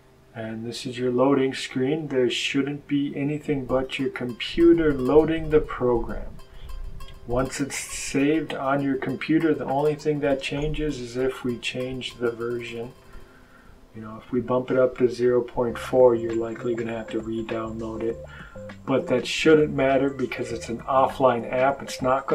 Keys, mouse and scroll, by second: 8.0 click, 12.9-14.5 drag, 15.8 click.